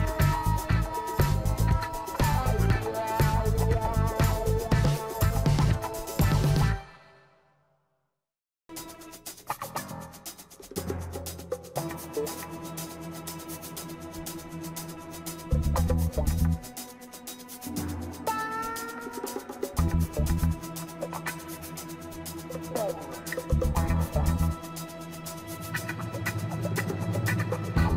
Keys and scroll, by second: 8.8 ctrl+t.